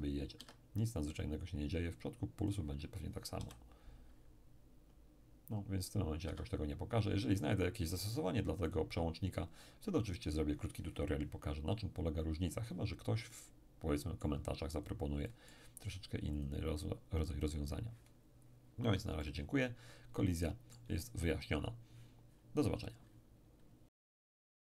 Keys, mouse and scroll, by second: 0.4 Escape, 2.4 click, 3.4 p, 6.3 Escape, 8.7 click, 13.3-17.4 middle drag, 14.7-17.4 drag, 19.2-21.7 middle drag.